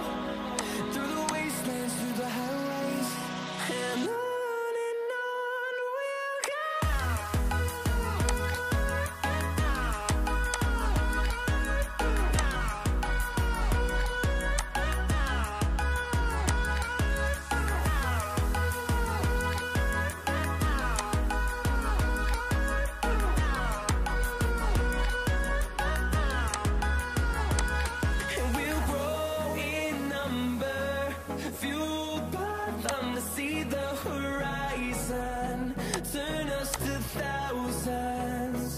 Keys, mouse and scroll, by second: 10.5 double click, 26.4 ctrl+click.